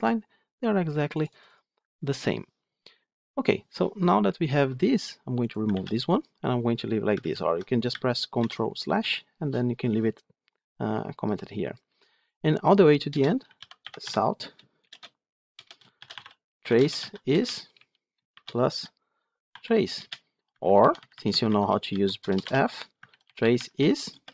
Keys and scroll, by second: 5.6 ctrl+x, 7.0 ctrl+z, 8.3 ctrl+/, 14.0 Tab, 19.9 Return, 22.9 Return.